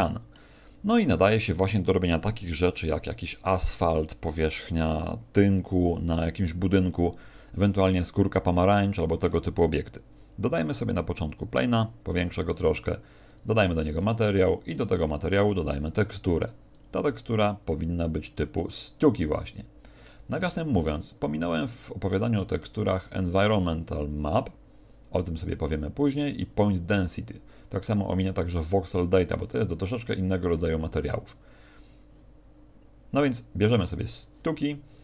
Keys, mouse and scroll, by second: 9.4 shift+a, 11.7 s, 12.3 click, 13.2 click, 13.9 click, 14.6 click, 15.4 click, 16.7 click.